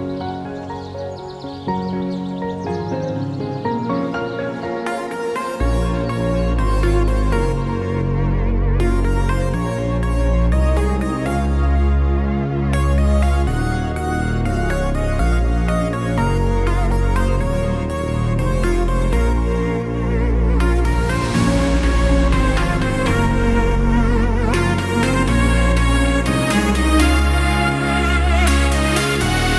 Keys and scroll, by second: 0.9 ctrl+z, 1.4 r, 4.7 r, 6.2 v, 10.4 ctrl+z, 13.3 Delete, 17.3 b, 27.1 1.